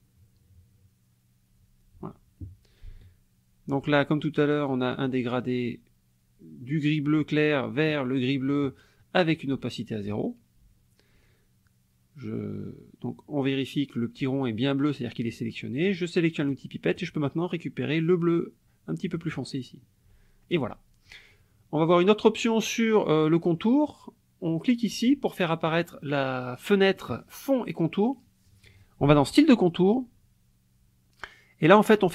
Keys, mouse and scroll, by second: 4.9 click, 8.5 click, 16.4 click, 19.0 click, 21.9 click, 25.7 click, 29.3 click.